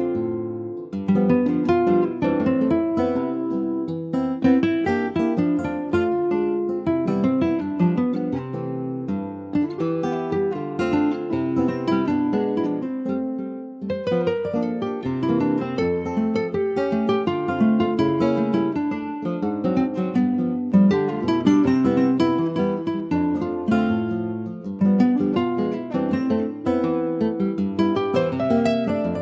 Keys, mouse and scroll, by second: 1.5 middle click, 1.9 Tab, 2.3 click, 2.7 middle click, 3.1 s, 4.5-6.8 right drag, 6.8 s, 11.2 middle click, 11.8 alt+z, 12.2 alt+middle click, 12.3 alt+scroll up 1, 12.6 alt+middle click, 13.4 Tab, 14.4 shift+middle click, 14.9 click, 16.3 click, 18.0 shift+middle click, 18.7 click, 19.3 shift+middle click, 19.6-20.8 shift+scroll up 4, 20.8 click, 22.6 scroll down 5, 22.8 shift+middle click, 23.4 Tab, 23.6 click, 24.0 alt+z, 24.3 middle click, 25.2 ctrl+s, 25.2 click, 25.6-27.0 middle drag, 27.0 scroll up 2, 27.4 click, 27.9 middle click, 28.6 s.